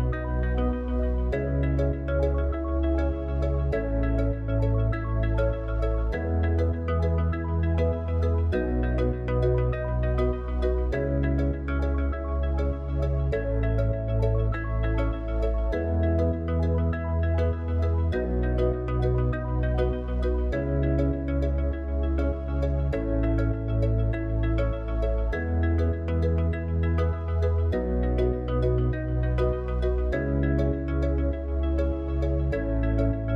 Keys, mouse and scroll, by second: 0.9 r, 4.7 KP_1, 7.7 s, 10.2 click, 13.0 KP_3, 14.8 r, 16.7 g, 17.9-21.0 middle drag, 25.9 click, 28.3 KP_7, 29.5-33.2 middle drag.